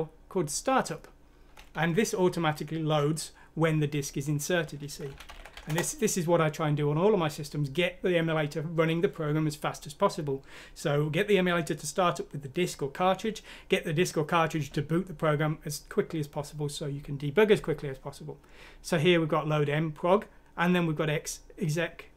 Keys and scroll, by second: 4.8-7.9 typing.